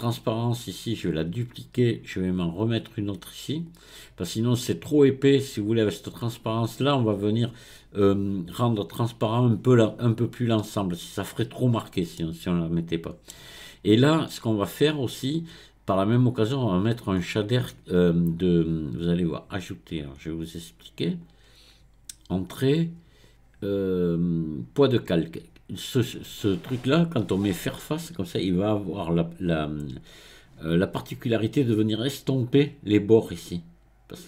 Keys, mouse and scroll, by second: 0.1-3.1 right drag, 3.7 click, 5.9 click, 12.2-15.2 middle drag, 21.1-24.3 drag.